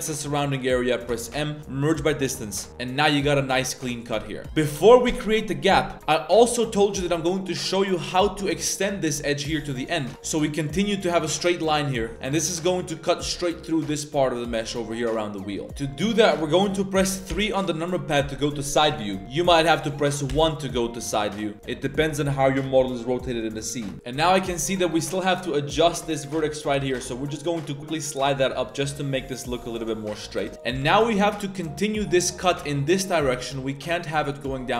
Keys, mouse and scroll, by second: 1.3 m, 2.2 middle click, 2.4 z, 2.7 Tab, 3.1 middle drag, 3.4 Tab, 4.1 a, 4.2 a, 7.2 middle drag, 8.5 middle click, 9.8 middle click, 11.9 middle click, 15.9-17.3 middle drag, 17.3 KP_3, 19.2 KP_1, 19.8 KP_1, 20.3 KP_1, 26.7 g, 30.5 z, 30.7 a, 30.8 a, 31.0 z.